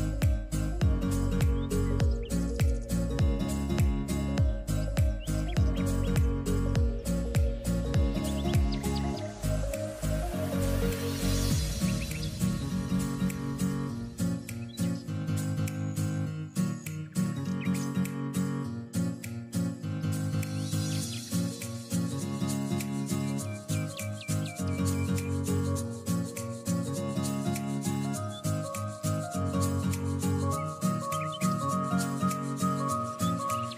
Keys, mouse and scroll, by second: 0.8 shift+d, 2.2-3.5 drag, 3.5 shift+d, 5.2 s, 8.7 click, 9.4 shift+d, 11.7 s, 16.1 click, 17.5 click, 18.4 s, 22.6 g, 24.9 click, 26.4 click, 26.9 click, 28.3 s, 30.1 click, 30.9 click, 31.6 click, 32.2 click, 33.0 click.